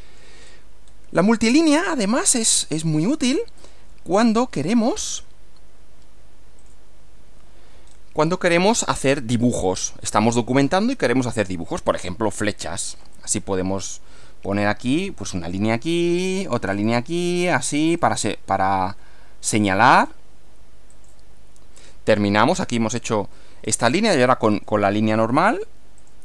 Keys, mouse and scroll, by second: 0.4-1.1 scroll down 4, 1.4 middle click, 2.3-3.1 middle drag, 3.6 click, 6.6 click, 7.9 scroll up 1, 8.7-9.6 middle drag, 13.1 click, 15.3 click, 16.7 click, 17.9 click, 20.0 click, 20.9 click, 22.1 click, 23.6 scroll up 1, 24.5 click, 26.0 click.